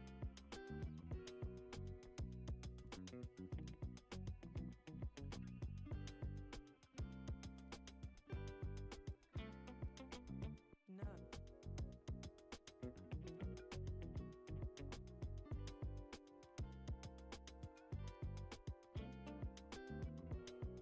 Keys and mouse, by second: 0.2 alt+shift+click, 1.7 e, 5.6-7.4 drag, 9.8-10.5 middle drag, 11.0 g, 13.1-13.7 middle drag, 14.5 KP_1, 15.5-16.0 shift+middle drag, 16.3-17.2 middle drag, 17.4 click, 18.8 shift+a.